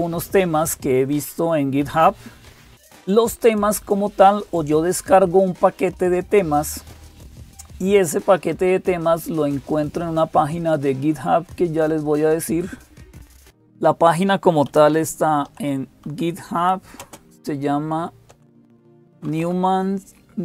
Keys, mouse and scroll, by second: 0.0-20.4 typing, 2.7 click.